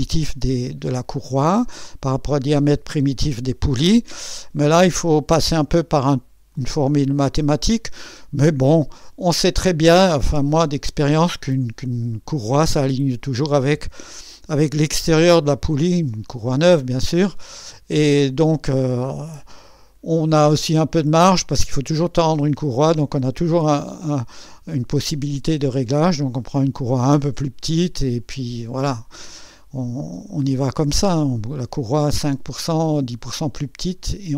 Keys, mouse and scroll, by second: 6.5-7.9 drag, 9.3-12.1 drag, 17.3-18.3 drag, 19.4-21.2 drag, 23.3-24.2 drag, 29.5-30.8 drag.